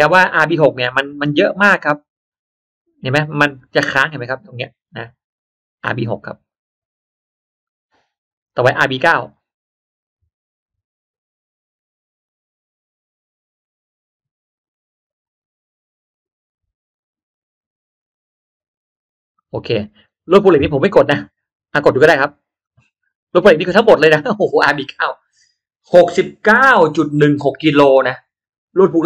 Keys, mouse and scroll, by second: 9.0 click, 11.1 click, 22.5 click, 23.3 click.